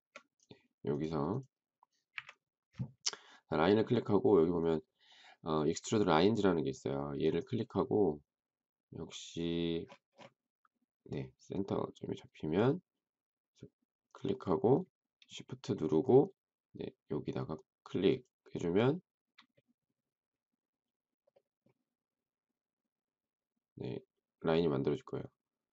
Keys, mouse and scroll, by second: 2.0 Delete, 18.0 shift+click.